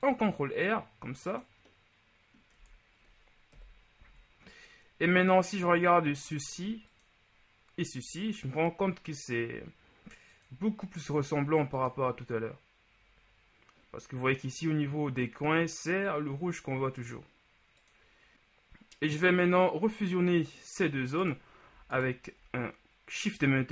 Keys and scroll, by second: 2.7 Tab, 3.6 KP_1, 4.1 a, 19.0 Tab.